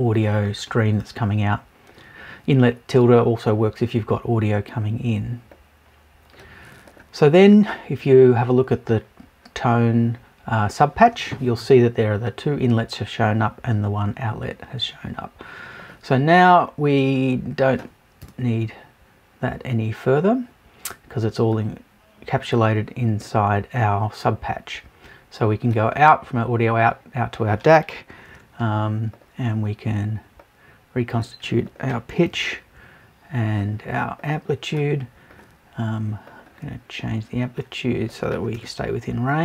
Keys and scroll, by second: 18.2 BackSpace.